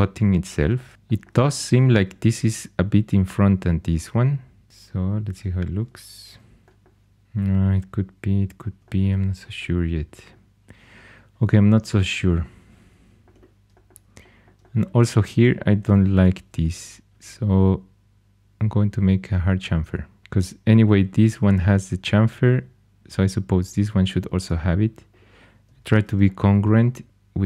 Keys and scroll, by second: 6.2 h, 15.8 2, 25.9 shift+super+e.